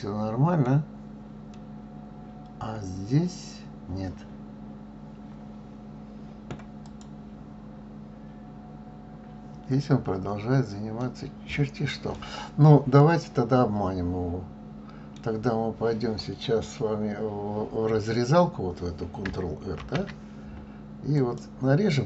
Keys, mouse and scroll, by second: 1.5-4.5 middle drag, 6.8 click, 7.8-8.4 scroll down 2, 8.4-11.0 scroll up 3, 11.0-16.0 middle drag, 19.8 ctrl+r.